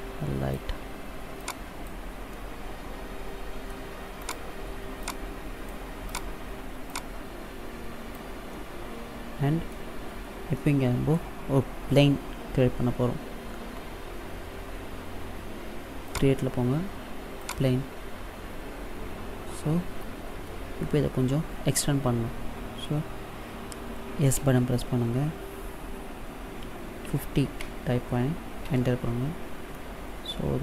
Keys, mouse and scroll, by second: 1.2 click, 2.2 middle click, 4.1 right click, 4.9 click, 6.0 right click, 6.7 click, 8.3 middle click, 10.4 middle click, 15.9 click, 17.2 click, 24.2 s, 29.5 middle click.